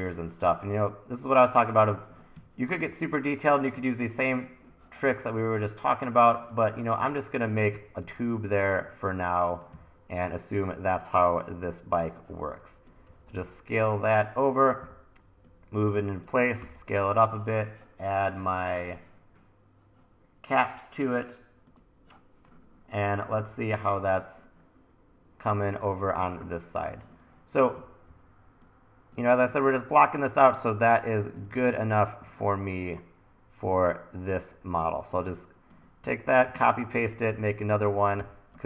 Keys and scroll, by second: 2.4 1, 7.7 e, 8.0 r, 9.7 e, 13.1 t, 14.8 e, 16.6 t, 23.8 super+s, 26.1 e, 27.7 w, 28.1 e, 31.5 super+z, 36.3 super+c, 36.4 super+v, 36.8-38.2 typing.